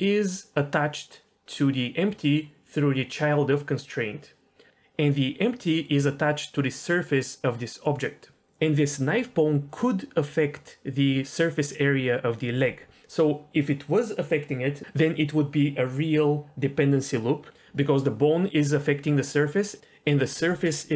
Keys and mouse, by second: 8.3 d.